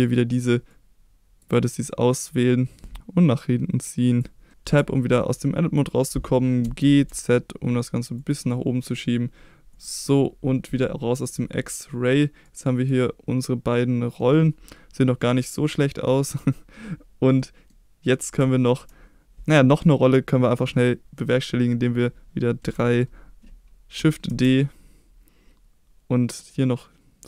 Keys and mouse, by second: 0.0 click, 0.8 click, 3.0-4.2 drag, 4.7 Tab, 6.7 g, 7.1 z, 8.2 click, 10.8-11.3 middle drag, 11.9-14.2 middle drag, 15.7-16.1 middle drag, 17.4-17.7 middle drag, 18.5 shift+middle drag, 22.7 KP_3, 24.3 shift+d.